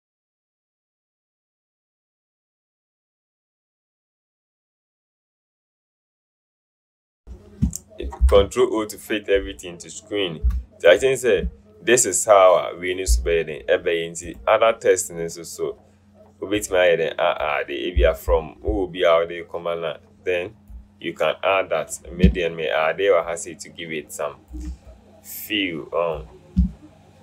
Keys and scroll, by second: 3.3 alt+Return, 8.3 ctrl+0.